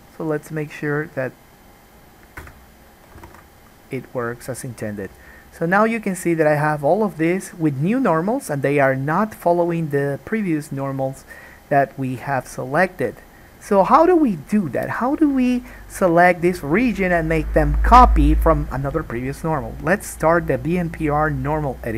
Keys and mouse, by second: 3.3 alt+click, 3.4 alt+a, 3.6-21.4 middle drag, 21.4 click.